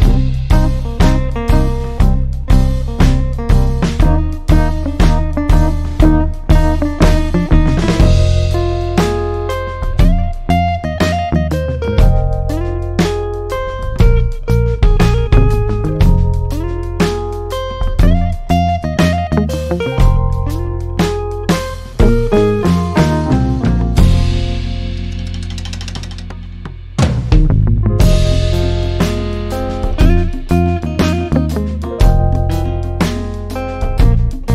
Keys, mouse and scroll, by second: 1.1-2.5 scroll up 1, 6.0-34.5 drag.